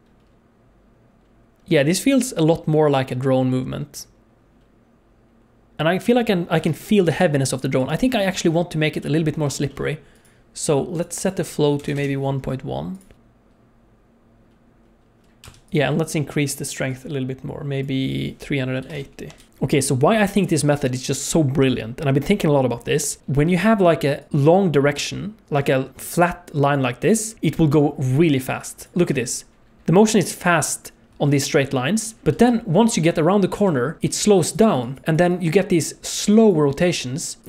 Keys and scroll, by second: 6.6 alt+shift+z, 7.1 space, 15.4 space, 19.5 space, 22.4 space, 24.3-27.7 d, 28.0 d, 28.6-28.9 d, 29.1 space, 31.1 space, 32.4 space, 33.5-37.4 typing.